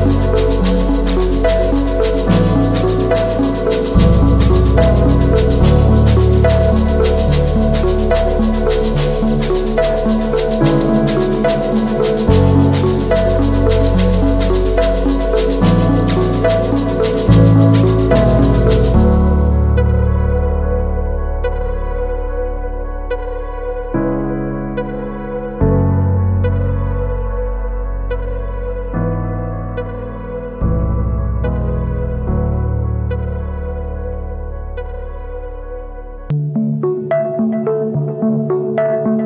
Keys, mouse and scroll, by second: 5.0 ctrl+click, 5.6 alt+right click, 13.1 ctrl+t, 17.3 Return, 26.7 double click.